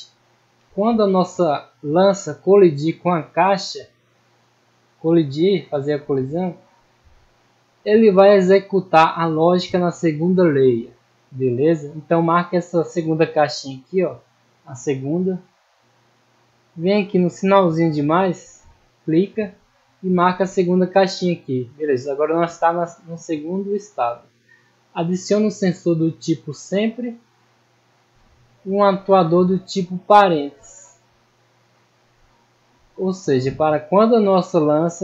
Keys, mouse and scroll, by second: 3.7 middle click, 5.4 middle click, 6.5 scroll up 1, 7.0 middle click, 8.4 middle click, 9.1 scroll up 1, 9.5 middle click, 11.9 scroll up 1, 12.3 middle click, 13.2 click, 13.9 click, 14.4 click, 15.1 middle click, 15.7 scroll down 1, 16.0 middle click, 16.7-17.1 scroll up 2, 18.9 click, 20.7 click, 21.6 scroll down 1, 23.1 middle click, 25.2 click, 26.5 click, 27.2 middle click, 28.2 scroll up 1, 29.0 click, 31.1 click, 31.7 middle click, 32.5-32.8 scroll down 1, 32.8 middle click, 34.1 click.